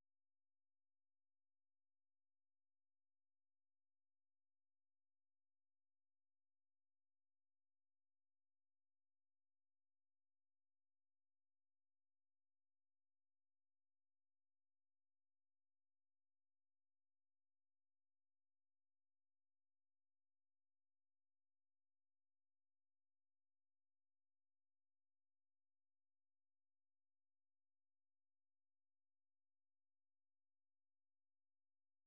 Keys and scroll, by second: 0.5 ctrl+t, 0.5-5.9 typing, 8.3-9.1 typing, 14.5 super+2, 16.1 ctrl+a, 16.7-21.4 typing, 29.9-31.0 typing.